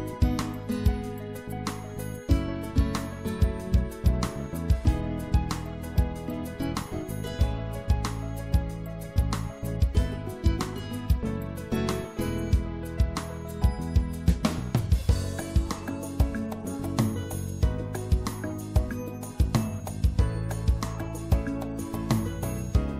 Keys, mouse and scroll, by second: 1.9 c.